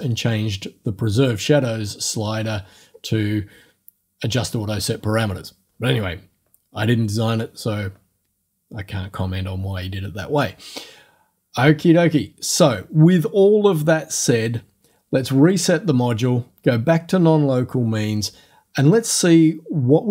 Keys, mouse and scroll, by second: 2.8 scroll down 2, 15.5 click.